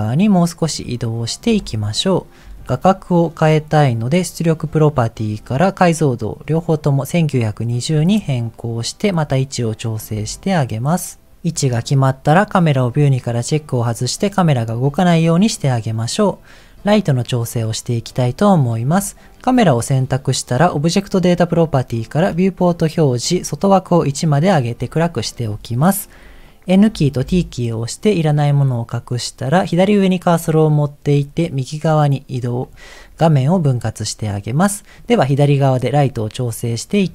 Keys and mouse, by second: 1.7 shift+middle click, 2.7 ctrl+middle click, 4.6 click, 5.3-7.5 drag, 8.3-10.0 ctrl+middle drag, 10.3-11.3 shift+middle drag, 12.7 click, 17.2 click, 21.9 click, 23.9 click, 26.7 n, 27.2 t, 30.3-32.6 drag, 34.7 middle click.